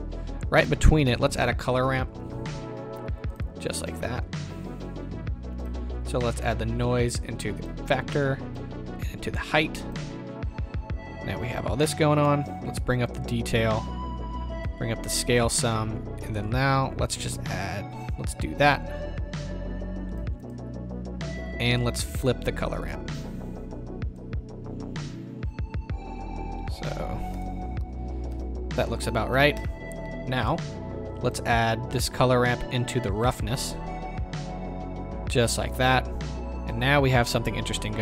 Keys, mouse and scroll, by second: 6.2 click, 6.8-19.6 drag, 20.5-21.0 drag, 22.9-25.4 middle drag, 25.4 click, 28.3 KP_0, 31.4-38.0 drag, 35.7 KP_0.